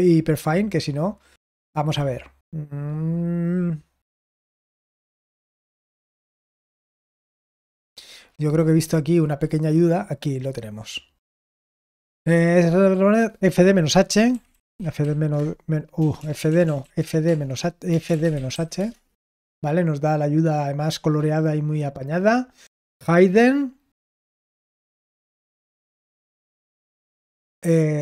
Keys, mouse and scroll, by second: 1.1-3.7 scroll up 1, 3.7-6.4 scroll up 1, 6.4-7.7 scroll up 1, 7.7-10.8 scroll up 1, 10.8-13.6 scroll up 1, 13.6 click, 14.0-18.9 typing.